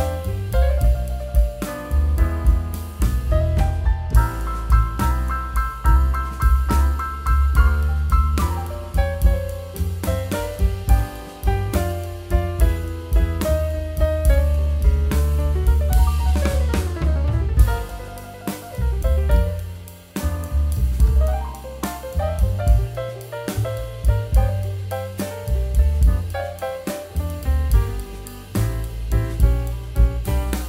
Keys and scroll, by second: 0.2 super+x, 1.5 super+x, 2.4 super+z, 3.6 super+x, 8.4 super+x, 8.5 super+v, 8.7 super+t, 10.4 Return, 12.8 super+e, 13.8 super+x, 14.6 super+x, 15.3 super+z, 16.8 alt+shift+super+n, 18.2 super+z, 22.8 super+z, 24.9 super+z, 25.7 super+z, 29.3 super+z.